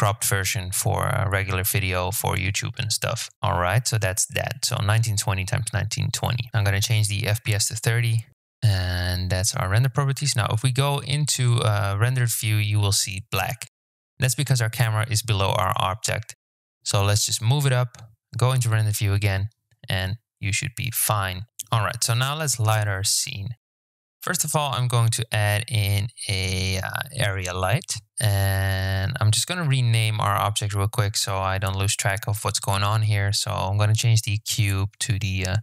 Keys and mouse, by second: 1.1 click, 1.1-3.4 right drag, 3.8-5.6 right drag, 6.8-8.5 drag, 9.1 z, 13.6 click, 14.7 g, 15.9 KP_0, 16.8 z, 19.5 z, 20.8 KP_1, 24.3 shift+a, 29.0 click, 33.0-35.6 drag.